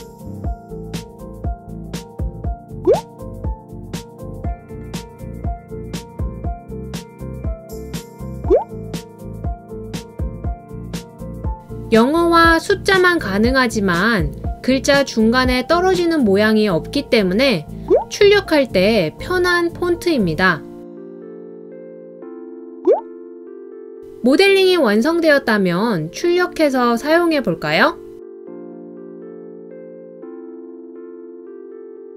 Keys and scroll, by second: 11.5-16.5 typing.